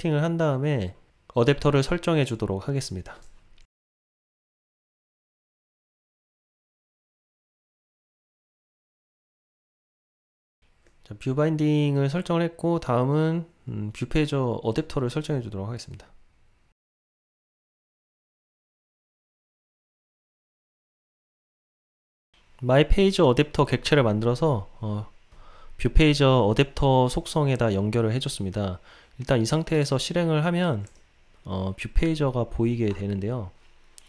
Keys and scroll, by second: 4.9 Return, 7.2 Return, 9.7 Return, 16.7 Delete, 18.2 Return, 20.3 Return, 29.9 ctrl+r.